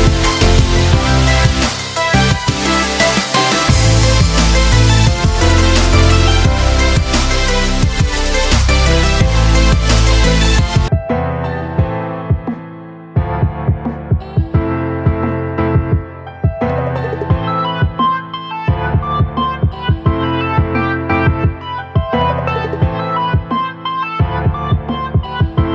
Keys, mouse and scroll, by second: 1.9 shift+Num_Lock, 2.0 click, 4.5 shift+click, 5.8 shift+click, 6.3 ctrl+right click, 7.8 click, 10.0 ctrl+t, 11.5-13.7 alt+drag, 13.7 ctrl+space, 13.9 ctrl+click, 14.2 ctrl+space, 14.8 space, 15.3-16.8 drag, 17.5 space, 17.7 click, 18.1 space, 19.9-24.2 drag.